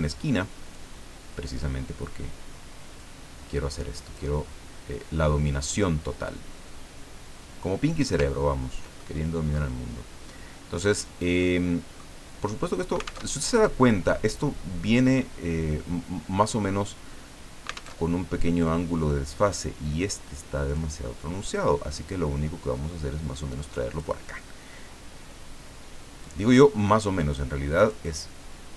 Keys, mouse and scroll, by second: 0.7 click, 3.0-4.4 drag, 6.3-8.3 drag, 8.3 ctrl+scroll down 2, 9.0 ctrl+middle click, 11.4 middle click, 13.3 alt+Tab, 17.9 alt+Tab, 20.7-24.1 drag, 26.2-27.5 drag, 27.8 click.